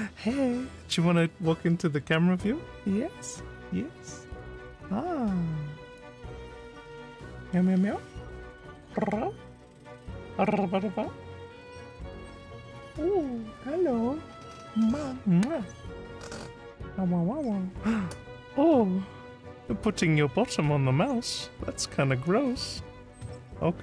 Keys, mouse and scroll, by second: 6.0 click.